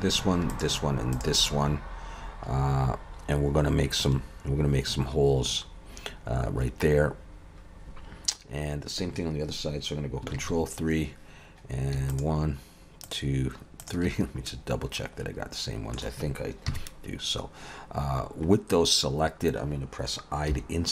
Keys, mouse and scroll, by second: 0.5 shift+click, 10.4 ctrl+KP_3, 12.1 shift+click, 14.5 middle click, 16.7 KP_3, 17.5-18.2 scroll up 2, 18.2-19.8 scroll down 2, 20.6 i.